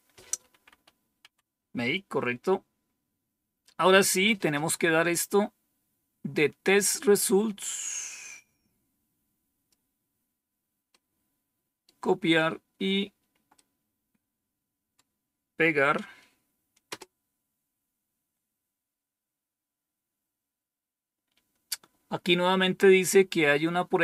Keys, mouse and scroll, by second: 0.6 Home, 1.1 End, 2.5-3.3 scroll down 1, 8.4-9.6 drag, 10.8 right click, 13.5-14.9 right drag, 16.8 Return.